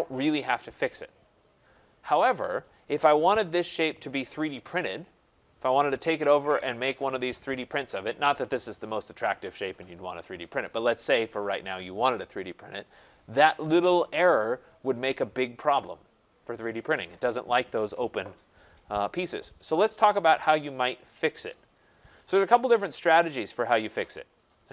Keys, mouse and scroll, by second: 20.2-21.2 scroll, 21.2 scroll, 23.1 right click, 23.5 scroll.